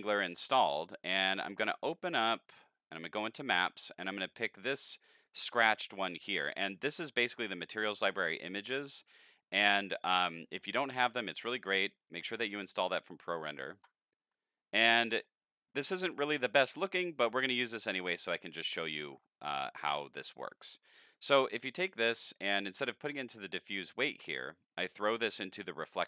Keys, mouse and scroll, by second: 0.0-0.3 scroll up 6, 0.0 g, 0.5 middle click, 1.2 click, 12.0 click, 12.1 click, 12.8 middle click, 13.7 ctrl+shift+click, 14.7 middle click, 15.2-15.7 middle drag, 16.5 middle drag, 19.4-20.4 middle drag, 20.9 middle click, 22.4-26.0 drag.